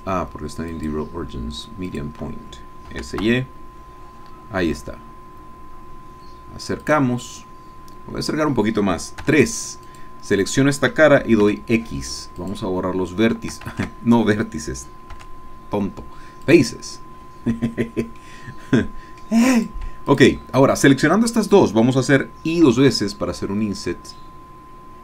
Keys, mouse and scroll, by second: 0.7 click, 1.9 click, 2.9 s, 3.2 y, 6.8 click, 7.3-8.2 scroll up 1, 9.2 3, 10.0 click, 11.4 x, 12.4 click, 13.7 ctrl+z, 15.1 x, 16.4 click, 17.2-17.6 scroll down 2, 17.8 scroll down 2, 18.2-19.6 middle drag, 19.6 click, 20.1 shift+click, 22.7 i.